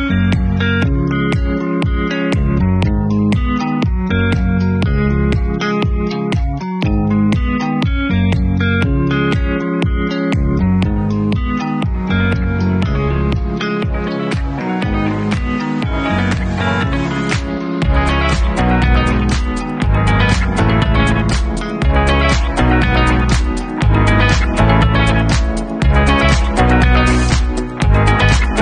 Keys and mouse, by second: 0.7 KP_Decimal, 2.3 click, 4.2 click, 6.2 e, 8.2 w, 9.7-14.1 drag, 9.7-14.1 middle drag, 9.7-20.7 right drag, 20.7 middle click, 20.8 right click, 21.2-21.7 right drag, 23.6 middle click, 24.6 e, 25.1 middle click, 25.8-28.6 ctrl+drag, 25.8-28.6 ctrl+right drag, 26.1 ctrl+z.